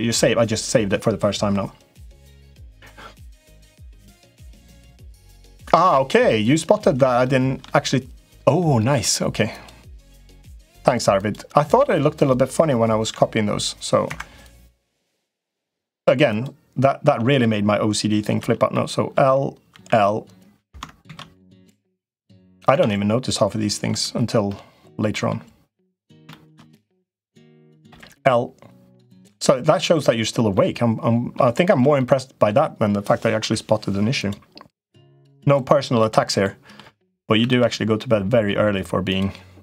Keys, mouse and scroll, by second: 6.1 middle click, 7.0 shift+middle click, 8.2 middle click, 8.5 middle click, 9.4 click, 10.1 click, 11.6 Tab, 12.0 click, 12.8 l, 13.8 Escape, 14.2 click, 14.7 Tab, 14.8 click, 16.1 click, 16.8 Tab, 17.2 click, 18.2 l, 18.5 middle click, 19.5 l, 20.8 ctrl+z, 21.7 l, 22.6 ctrl+z, 23.7 l, 24.3 middle click, 26.2 middle click, 27.6 l, 28.2 middle click, 29.7 l, 30.4 middle click, 31.4 shift+middle click, 31.8 middle click, 33.1 Delete, 34.8 click, 35.8 l, 36.3 middle click, 37.1 s, 39.1 s.